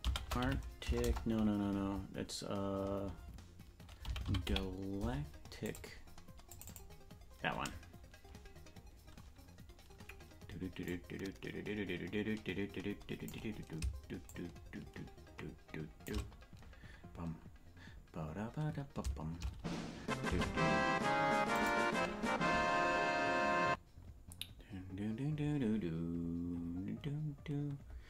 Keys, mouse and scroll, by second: 10.8-13.3 drag, 14.2-16.1 shift+drag.